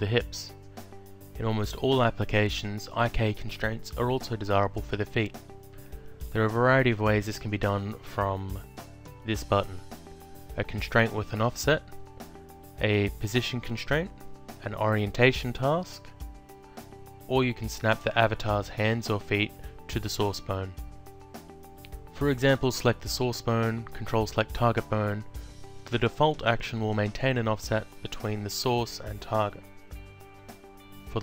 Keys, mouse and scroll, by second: 8.5 click, 21.2 click, 23.5 ctrl+click, 24.8 click, 30.3 click.